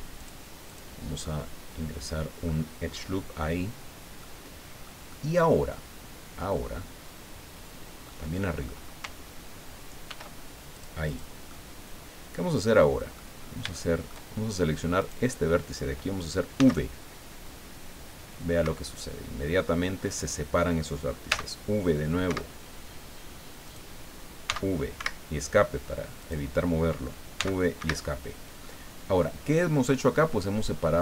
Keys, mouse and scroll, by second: 0.2 ctrl+click, 0.7 ctrl+click, 1.2-2.6 drag, 2.9 scroll up 2, 3.6 scroll down 2, 4.2 click, 5.1-8.2 drag, 8.4 click, 10.1 ctrl+r, 10.7 click, 11.0 middle click, 11.5-13.3 middle drag, 13.4 scroll up 1, 13.7 shift+middle click, 15.0 right click, 16.6 v, 18.6 Escape, 20.2 right click, 21.3 v, 22.2 Escape, 23.6 right click, 24.5 v, 25.0 Escape, 26.2 right click, 27.3 v, 27.8 Escape, 28.7 click, 29.5 click.